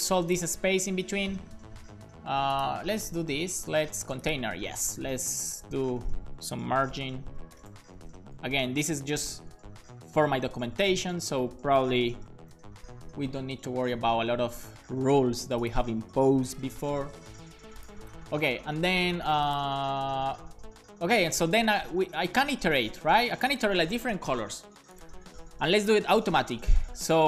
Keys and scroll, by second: 4.9-9.8 typing, 11.3 0, 12.4 x, 12.5 space, 13.0 c, 13.3 super+s, 16.6 BackSpace, 17.3 super+s.